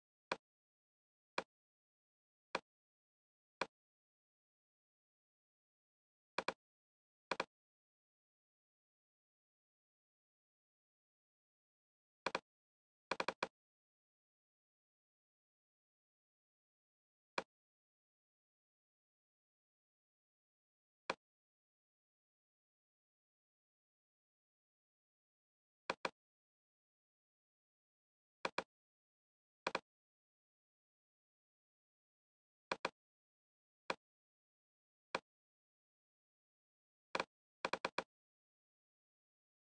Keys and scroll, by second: 23.6 Right.